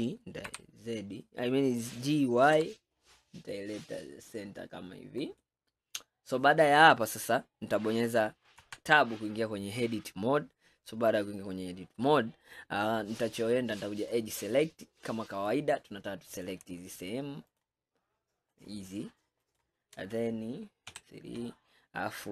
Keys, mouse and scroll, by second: 8.6 Tab, 14.0 click, 14.6-16.4 middle drag, 16.4 click, 17.5 shift+click, 18.6 shift+click, 19.5 shift+click, 20.9 KP_3.